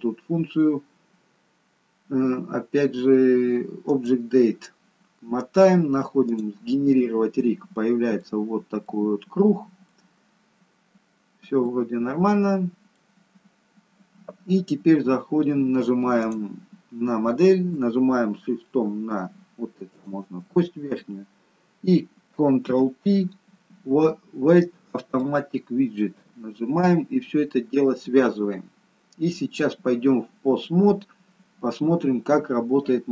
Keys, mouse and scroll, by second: 3.7 click, 4.7-6.2 scroll down 3, 6.2 click, 6.2 scroll down 2, 7.4 middle click, 8.8 middle click, 10.0-10.6 scroll down 1, 10.6-11.3 scroll up 2, 11.5 middle click, 13.1-13.8 scroll down 1, 16.1 click, 19.8 shift+click, 22.7 ctrl+p.